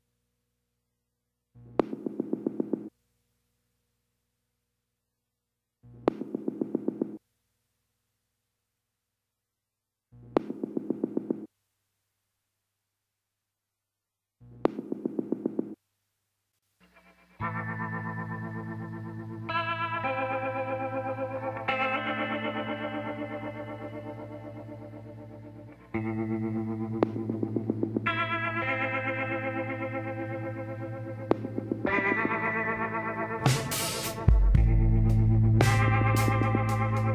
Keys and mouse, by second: 2.4 z, 4.7-6.6 drag, 5.8 l, 6.8 s, 9.5-11.3 drag, 11.8-13.5 drag, 13.6 KP_7, 18.7 right click, 19.5 l, 20.3 z, 21.1-22.9 drag, 27.6-29.6 drag, 28.8 l, 31.7-33.5 drag, 36.5 middle click, 37.0 z.